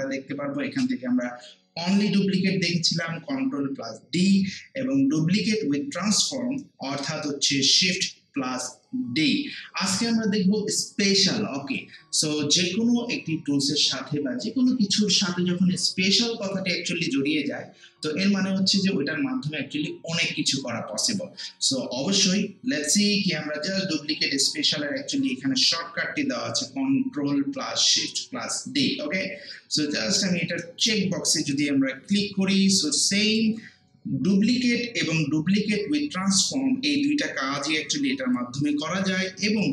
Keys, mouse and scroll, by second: 30.8-35.6 drag.